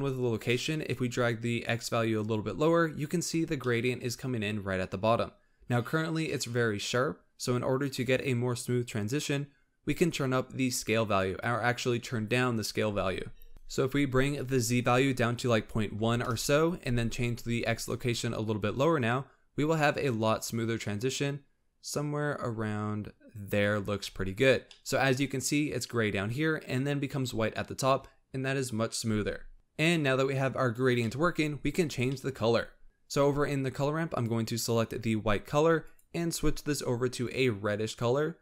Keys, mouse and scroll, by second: 0.7-3.7 drag, 3.7-6.7 middle drag, 13.5 click, 14.4-17.4 drag, 17.8-20.8 drag, 24.7-29.5 middle drag, 31.0 middle click, 31.5-32.1 scroll up 5, 32.1 middle click, 32.4-32.8 scroll up 1, 32.8-34.1 middle drag, 34.1-36.0 drag.